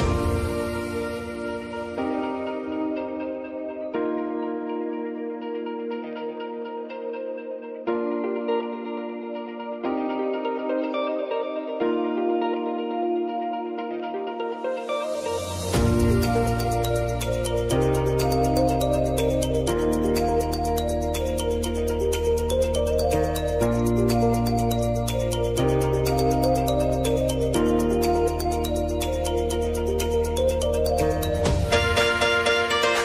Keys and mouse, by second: 0.8 p, 2.8 click, 6.6-9.4 drag, 9.4 s, 10.0 click, 10.8 space, 12.5 click, 13.3 j, 14.3 click, 15.5 Return, 18.4 =, 19.0 click, 20.3 F9, 20.7 =, 21.5-25.1 drag, 25.5 space, 26.7 click, 28.5 p, 29.2 click, 29.9 u, 31.0 p, 32.5 click.